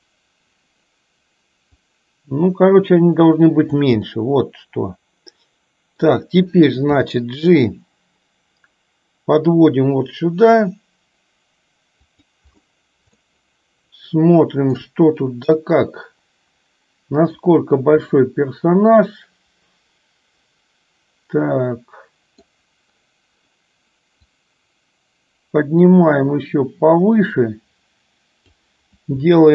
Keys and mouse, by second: 1.9-4.1 drag, 4.3-6.3 middle drag, 7.0 g, 13.4-14.9 shift+middle drag, 15.9-17.7 middle drag, 18.3-22.7 middle drag, 24.5-28.8 drag.